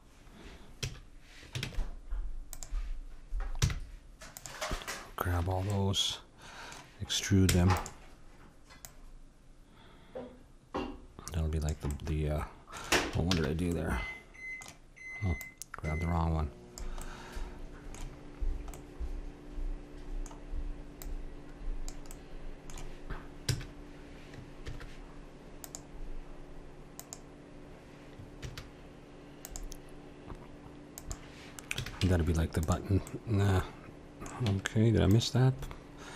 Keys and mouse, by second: 0.8 a, 1.6 ctrl+Tab, 3.6 c, 5.7-7.5 middle drag, 7.5 e, 8.9-10.6 drag, 11.9 middle click, 13.3 ctrl+z, 15.4-17.6 drag, 21.0-23.5 drag, 23.5-24.7 middle drag, 23.5 a, 24.7 ctrl+r, 28.4 ctrl+r, 31.8 a, 32.8 Tab, 33.1 click, 33.8-35.0 middle drag, 34.4 Tab, 35.7-36.1 middle drag.